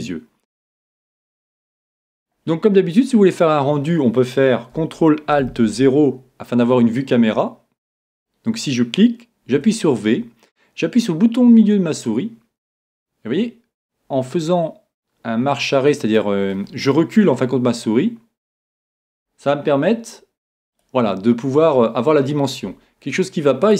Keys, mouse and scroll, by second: 2.9-4.7 middle drag, 5.7 ctrl+alt+n, 8.2-9.8 right drag, 9.5 g, 20.8 click.